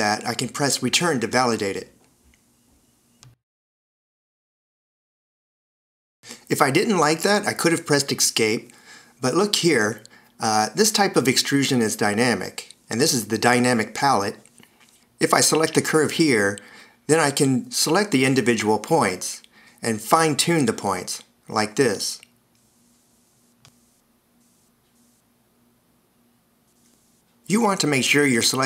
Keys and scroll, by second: 0.7 Return, 6.0 Escape, 20.3 a.